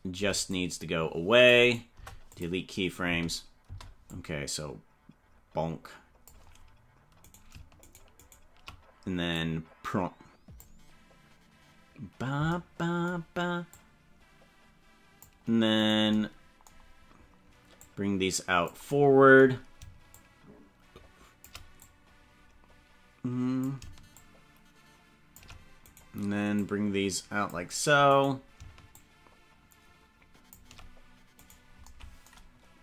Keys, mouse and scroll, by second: 0.1 c, 1.9 Delete, 3.0 space, 3.8 space, 4.1-6.4 drag, 7.3 right click, 8.4 shift+right click, 9.3-10.6 drag, 13.7-15.4 drag, 15.9 right click, 17.7 click, 20.1-21.4 shift+drag, 21.8-23.6 drag, 24.1-25.4 shift+drag, 25.9 right click, 26.5-27.6 drag, 28.2 right click, 28.9-30.6 shift+drag, 31.4 right click.